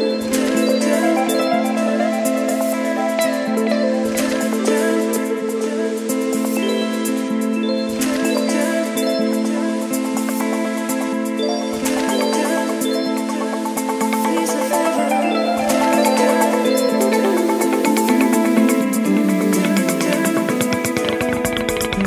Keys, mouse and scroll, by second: 0.0-11.2 typing, 0.7 Return, 4.8 Return, 6.1 ctrl+z, 11.7 Return, 12.3-20.1 typing, 20.9-22.0 middle drag.